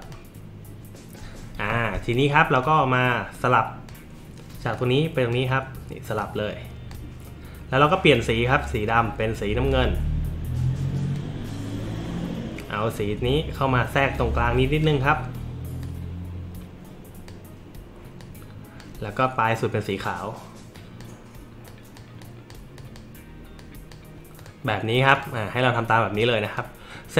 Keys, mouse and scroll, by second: 0.0 click, 2.6-3.9 drag, 4.7-5.3 drag, 6.2-6.9 drag, 9.7-11.1 drag, 13.0-14.8 drag, 15.8-17.3 drag, 18.2-18.8 drag, 20.8 click, 21.7 click, 22.2 click, 22.8 click, 23.6 click, 24.4 click, 25.2 click, 26.2 click.